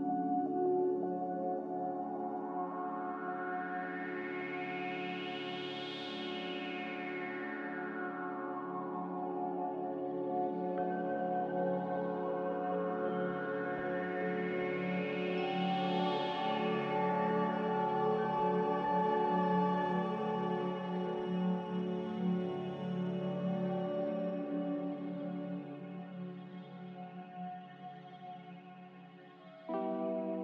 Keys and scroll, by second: 5.1 g, 8.1 c, 12.8 ctrl+c, 13.5 ctrl+r, 17.9 z, 21.3 a, 24.6 Delete, 28.1 Delete, 28.6 typing.